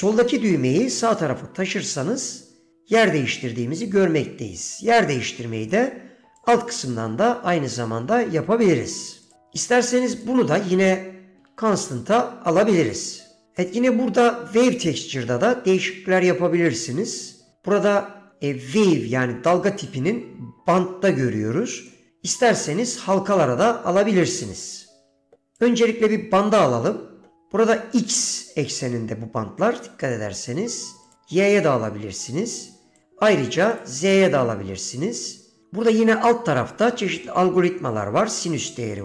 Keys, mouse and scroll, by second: 6.5 click, 9.4 click, 10.3-12.7 drag, 13.7 middle click, 14.8 middle click, 17.6-22.1 drag, 24.6 middle click, 25.7-26.6 drag, 30.2-31.2 drag, 33.1-34.0 drag, 38.5-39.0 drag.